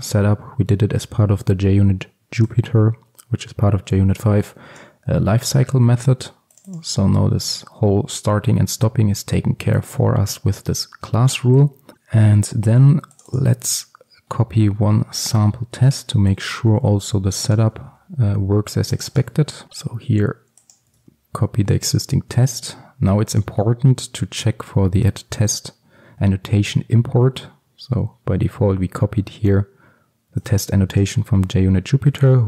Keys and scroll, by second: 17.8 ctrl+c, 19.7 ctrl+v, 21.0 ctrl+x.